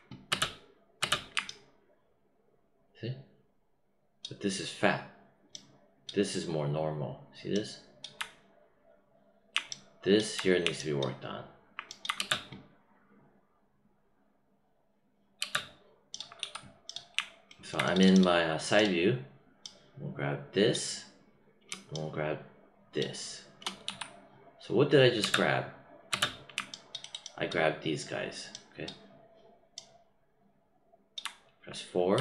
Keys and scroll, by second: 0.2 space, 12.1 space, 15.3 space, 16.3 w, 23.8 q, 25.1 space, 32.1 4.